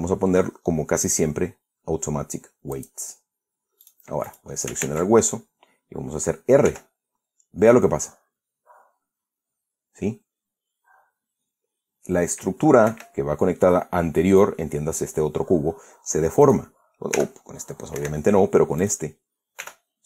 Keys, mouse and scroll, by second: 3.4 click, 4.5 right click, 4.9 right click, 5.5 ctrl+Tab, 7.3 r, 13.5 Escape, 17.1 click, 17.8 r, 18.6 Escape, 19.5 right click.